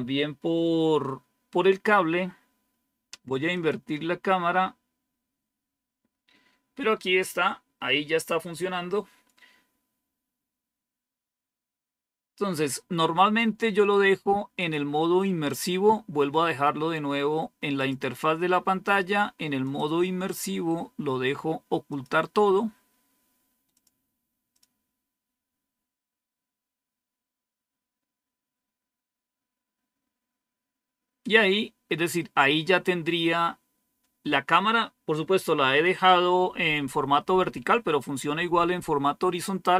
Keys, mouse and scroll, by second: 3.4 click, 3.9 click, 14.5 click, 17.7 click, 19.5 click, 21.8 click, 23.6 click, 24.4 click.